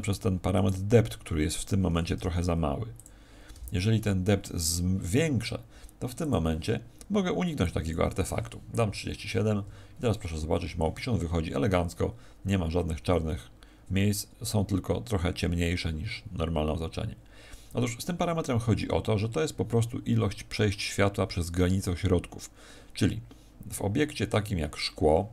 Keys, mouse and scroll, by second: 0.0 right click, 0.5 right click, 2.1 t, 2.9 click, 3.4 t, 6.1 click, 7.6 click.